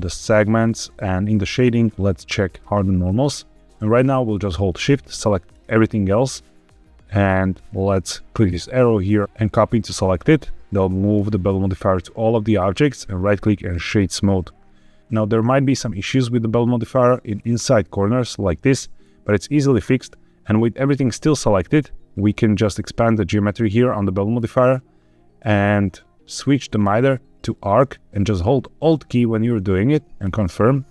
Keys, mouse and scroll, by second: 1.1 click, 2.4 click, 3.7-4.2 middle drag, 4.6-5.4 shift+drag, 8.2-9.8 drag, 12.1 middle click, 12.9-13.9 right drag, 16.7 middle click, 17.2 scroll up 2, 18.9-19.7 scroll down 1, 22.8 click, 24.3-25.9 scroll down 2, 26.7-30.2 drag.